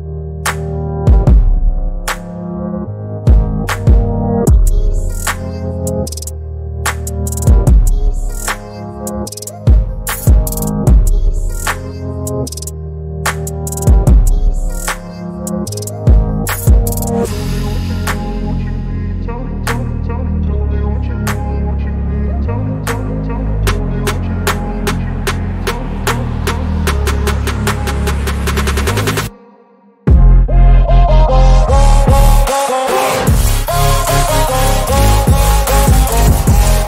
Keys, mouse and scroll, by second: 1.5 click, 1.9 click, 3.3-4.4 drag, 4.4 ctrl+z, 5.0 right click, 6.7 click, 7.1 ctrl+r, 8.0 click, 8.2 ctrl+r, 9.1 click, 10.8 g, 11.6 click, 12.7-14.1 alt+drag, 14.3 alt+shift+click, 14.6 alt+shift+click, 15.2 click, 16.4 alt+shift+click, 16.7-17.9 alt+shift+drag, 18.0 alt+shift+click, 19.4 shift+click, 19.6 shift+click, 20.3 shift+click, 20.5 shift+click, 22.2 click, 22.6 ctrl+a, 23.1 click, 24.5 click, 25.1 typing, 26.9 click, 27.4 scroll up 1, 27.6 e, 28.0 s, 28.6 alt+s, 29.9 click, 30.6 click, 31.0 x, 31.3 ctrl+z, 31.5 x, 32.0 click, 32.5 click, 32.7 x, 33.1 click, 33.9 click, 34.4 ctrl+s, 35.1 KP_3, 35.5 click, 36.2 right click, 36.8 scroll down 5.